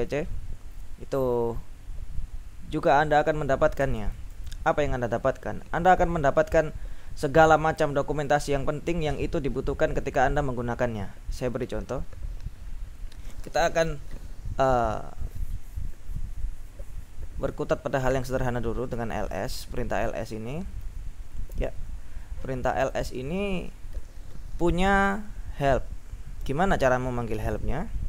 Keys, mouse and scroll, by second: 0.0-0.4 typing, 3.9 BackSpace, 18.6-19.5 typing, 20.9 ctrl+l.